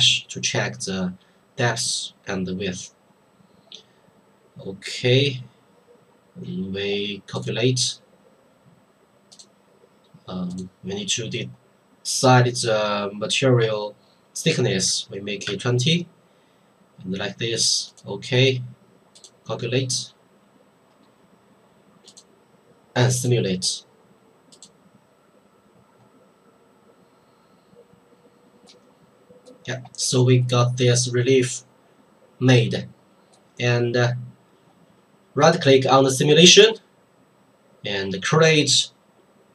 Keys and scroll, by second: 15.5 KP_2, 15.6 KP_0.